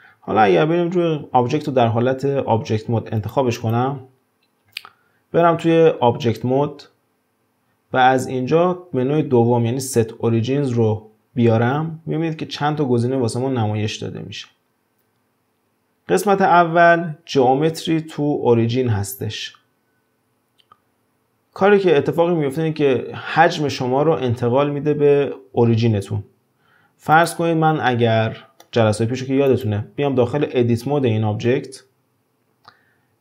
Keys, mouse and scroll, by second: 3.2 click, 3.6 click, 6.2-9.3 drag, 27.1 drag, 27.5-27.9 scroll down 3, 27.9-29.5 middle drag, 29.5 click, 31.5 Tab.